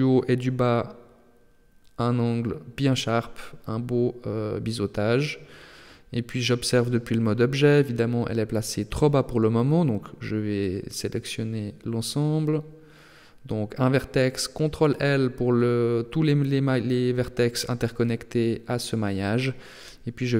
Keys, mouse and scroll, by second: 3.6 click, 4.2 middle click, 5.1 Tab, 5.6 middle click, 6.5-7.1 scroll down 1, 7.1 Tab, 7.1-7.6 scroll down 1, 7.8 right click, 8.8 ctrl+l, 10.7 alt+h, 12.6 right click, 13.6 ctrl+l, 15.4 KP_3, 16.9 g, 19.4 middle click.